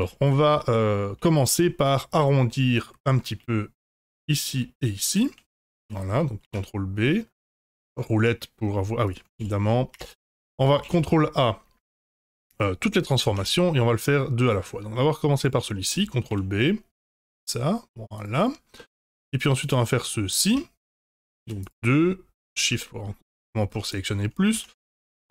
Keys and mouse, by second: 0.0 2, 0.3 click, 0.5 middle click, 1.4 shift+click, 1.8-3.1 middle drag, 3.8 shift+click, 4.1 middle click, 5.5 middle click, 6.4 ctrl+b, 9.3 ctrl+z, 9.9 Tab, 10.2 middle click, 10.8 ctrl+a, 13.0 middle drag, 13.3 Tab, 15.3 shift+click, 15.7 middle click, 16.2 ctrl+b, 18.4 click, 18.7 middle click, 19.6 click, 19.9 middle click, 20.4 Tab, 21.0 Tab, 21.4 2, 22.3 shift+click, 22.7 middle click, 23.4 shift+middle click, 24.5 ctrl+b.